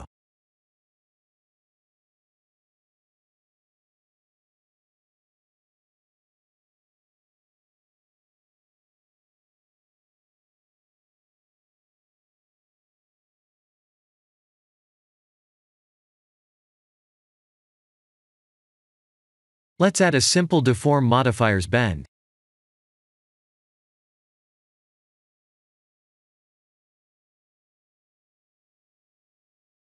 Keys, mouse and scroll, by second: 6.6 ctrl+z, 8.2 shift+a, 12.9 right click, 15.6 click, 16.4 click, 17.1 middle click, 18.7 click, 19.6 click, 23.5 click, 26.4 click, 29.8 click.